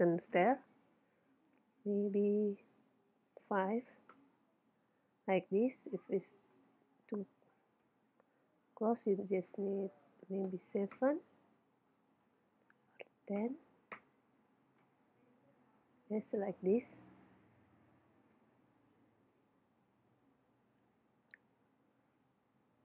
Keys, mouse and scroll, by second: 6.6-8.4 drag, 12.3-14.1 drag, 15.4-17.6 middle drag, 17.7-19.3 drag, 18.8 KP_1, 20.0 KP_3, 21.3 middle click.